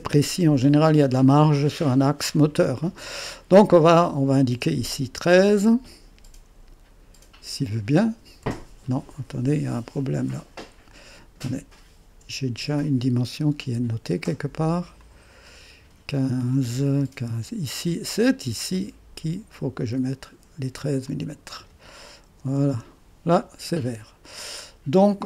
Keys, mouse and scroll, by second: 4.0 click, 5.4 click, 8.0-8.9 typing, 10.6 Escape, 12.9-14.9 drag, 15.1-16.8 drag, 19.6 click, 21.1 click, 22.1-23.0 typing.